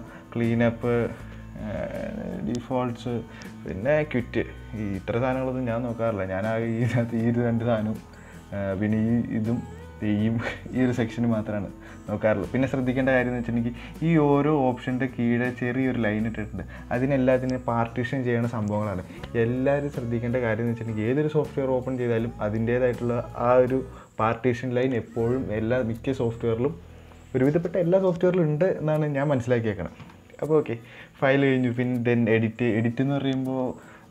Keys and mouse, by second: 32.1-34.1 drag.